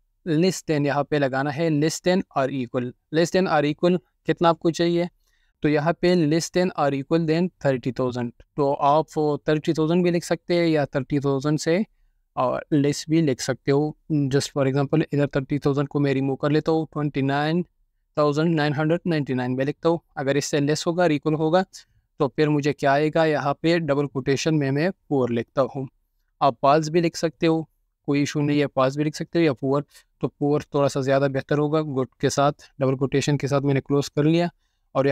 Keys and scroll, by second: 2.1-3.4 typing, 10.2-11.9 typing, 15.6-19.1 typing, 20.8 typing, 22.5 typing, 25.4-32.1 typing.